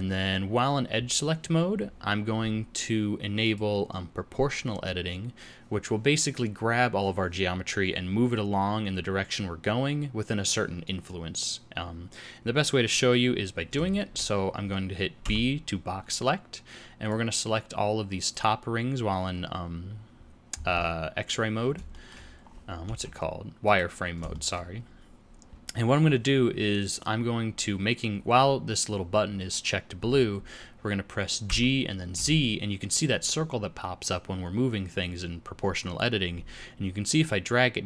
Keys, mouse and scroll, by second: 3.4 click, 13.9 shift+middle click, 15.2 b, 21.9 shift+middle click, 22.3-22.9 scroll up 2, 22.8 z, 24.3 shift+middle click, 24.7 scroll down 2, 31.4 g.